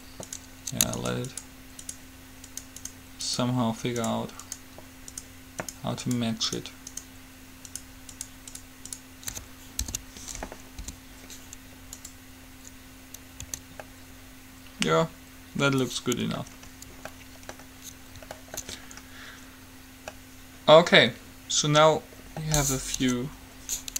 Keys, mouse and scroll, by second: 10.2 alt+p, 11.0 u, 13.7 Tab, 23.2 KP_3.